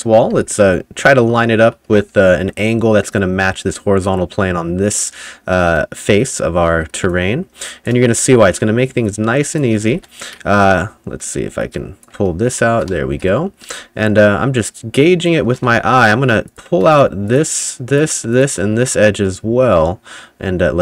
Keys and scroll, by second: 0.3 ], 1.4-2.6 typing, 10.0 ctrl+z, 12.6 w, 12.9 s, 13.7 s, 15.7 ctrl+z, 16.2 2.